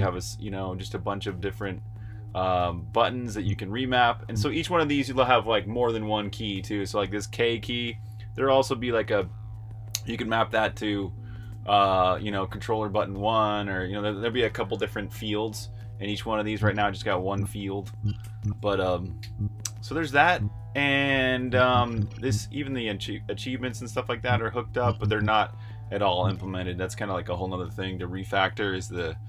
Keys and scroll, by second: 2.8-4.0 typing, 16.3-19.1 typing, 20.1 Escape, 20.8-22.5 typing, 23.8-24.9 typing, 25.9 typing.